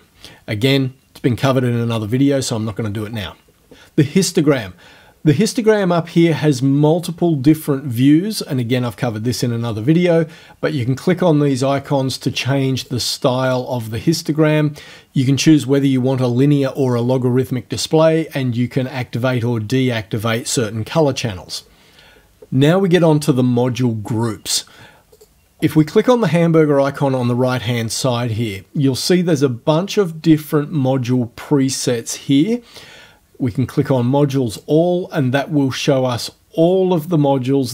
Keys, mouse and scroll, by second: 11.8 click, 12.4 click, 12.8 click, 13.5 click, 25.2 click, 34.6 click, 36.7 click.